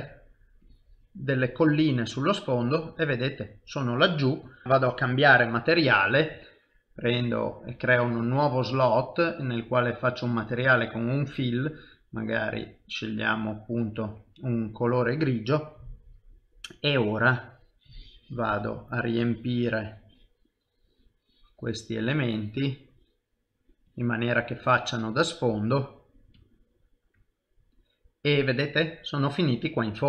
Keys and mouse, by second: 1.5 click, 1.5 middle click, 3.7 typing, 4.8 click, 5.2 click, 14.4 typing, 16.8 click, 22.3 typing, 23.9 click, 26.5 ctrl+middle click, 27.4 middle click.